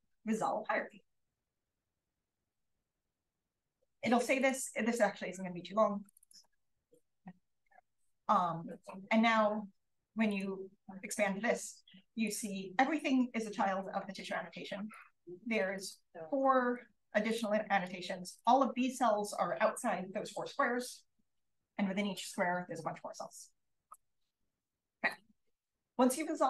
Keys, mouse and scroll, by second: 4.3-7.0 drag, 4.6-7.0 right drag, 14.8 click, 14.8 right click, 15.7 click, 15.7 right click, 16.7 click, 17.7 click, 18.3-21.0 drag, 24.7 click.